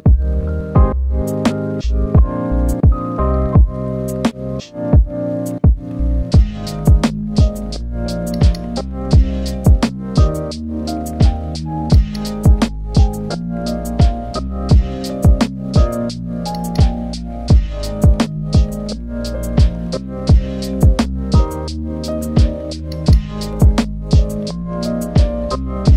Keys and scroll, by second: 19.1 ctrl+z, 20.9 ctrl+z.